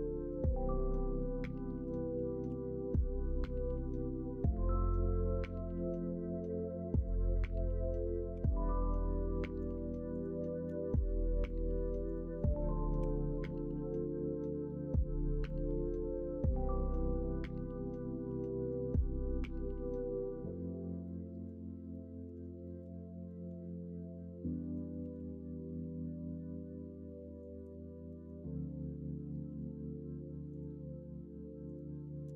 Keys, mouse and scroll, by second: 0.2-0.9 scroll up 1, 0.9-1.8 scroll up 1, 1.8 middle click, 1.8 scroll down 1, 2.4 ctrl+r, 7.3 middle click, 8.3 2, 9.2 middle click, 10.9 ctrl+z, 11.4 click, 12.9 g, 17.2-21.4 middle drag, 17.2-18.7 scroll up 1, 18.7 scroll up 1, 21.9-22.2 scroll up 1, 22.2 middle click, 22.6 scroll up 1, 23.2-24.9 middle drag, 25.1 ctrl+r, 28.1 middle click, 29.4 k.